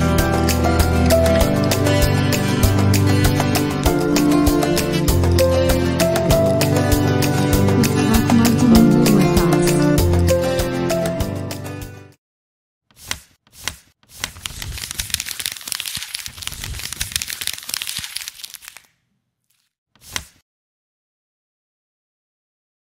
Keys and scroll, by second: 2.2 super+i.